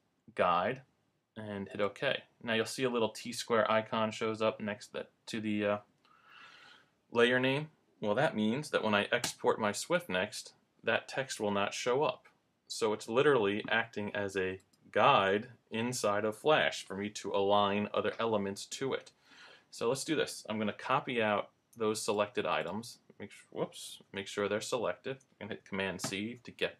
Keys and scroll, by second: 9.2 super+Return, 23.9 super+z, 26.0 super+c.